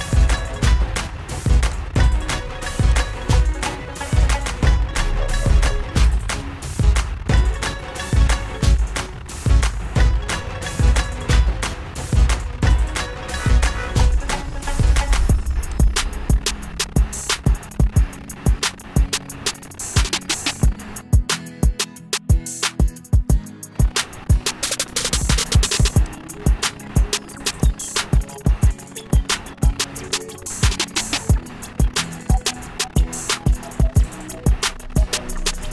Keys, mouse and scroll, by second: 2.0 click, 3.3 click, 9.6 click, 10.3 middle click, 11.3 scroll, 11.5 middle click, 11.8 shift+middle click, 12.0-12.7 scroll, 12.7-14.7 scroll down 32, 16.1 click, 24.7-27.4 click, 26.3 click, 26.7 click, 27.7 click, 32.2 click.